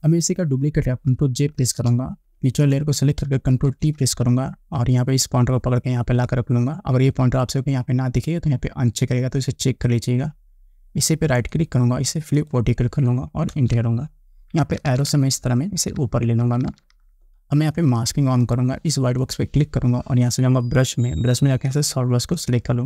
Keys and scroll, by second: 1.9 ctrl+j, 3.9 ctrl+t, 13.7 Return, 14.8 Up.